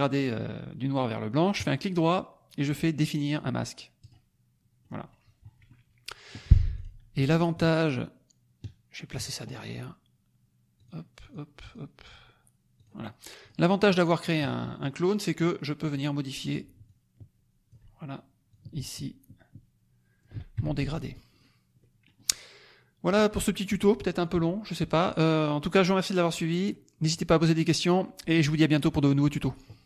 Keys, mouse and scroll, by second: 1.6 click, 4.0 click, 4.8 middle click, 5.4 middle click, 6.7 click, 7.1 click, 7.5-9.3 ctrl+drag, 10.7 click, 11.2 click, 11.6 click, 12.7 click, 13.4 click, 13.8 middle click, 15.4 click, 16.8-17.8 ctrl+drag, 18.4-20.3 ctrl+drag, 20.6 ctrl+F1, 20.8 ctrl+middle click, 21.4 ctrl+scroll up 1, 21.7 ctrl+middle click.